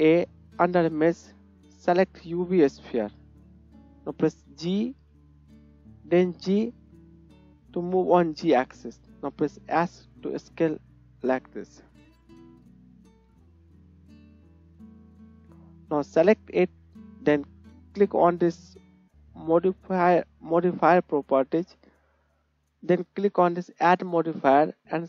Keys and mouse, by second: 2.3 click, 2.3-7.5 right drag, 4.2 g, 7.5-13.4 drag, 9.0 s, 13.1 KP_1, 13.4 middle click, 13.5-14.0 drag, 14.0 middle click, 14.1-24.0 drag, 24.0-25.0 middle drag.